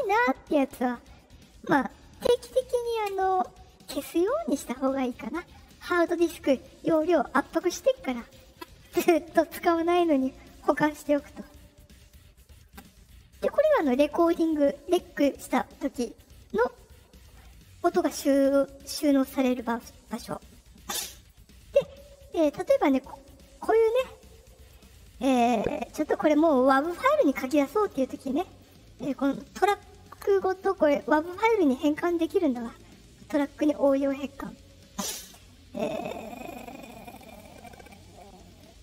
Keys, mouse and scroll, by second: 3.0 click, 13.7 click, 15.9 click, 19.4 click, 19.5 click, 21.1 click, 23.1-24.6 drag, 27.8 click, 28.5 click, 30.4 right click.